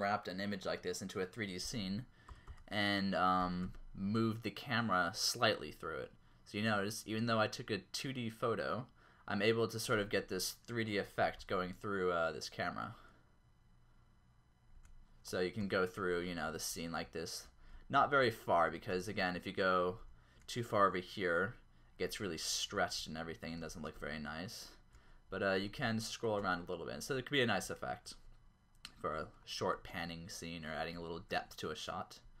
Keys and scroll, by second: 2.5-3.6 typing, 11.1 r, 11.4 x, 15.6-20.2 typing, 22.5-24.1 typing, 26.0 shift+q, 27.7 q, 29.9 q, 31.0 typing.